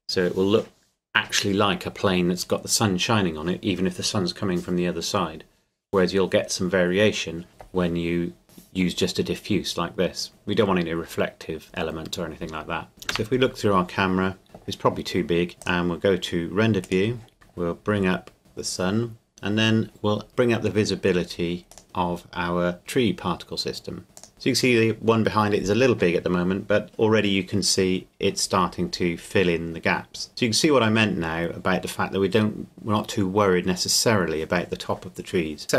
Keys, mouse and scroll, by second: 12.9 click, 13.1 KP_0, 14.4-15.5 scroll down 1, 15.6 click, 17.9 click, 21.7 right click, 24.1 click.